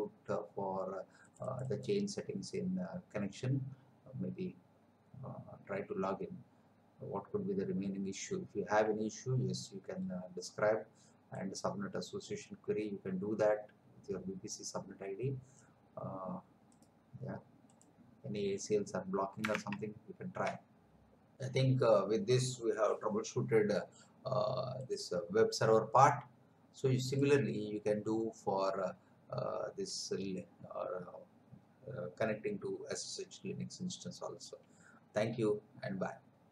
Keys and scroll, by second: 19.7 alt+Tab, 20.4 alt+Tab.